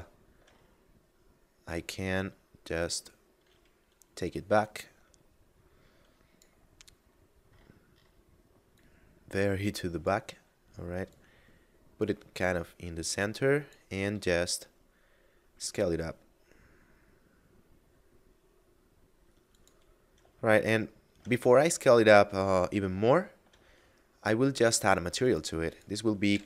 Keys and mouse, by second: 4.5 click, 6.5 middle click, 8.5 click, 10.9 click, 14.0 s, 19.4 click, 20.4 shift+middle click, 23.0 shift+middle click, 24.3 shift+middle click, 25.1 click, 26.2 b.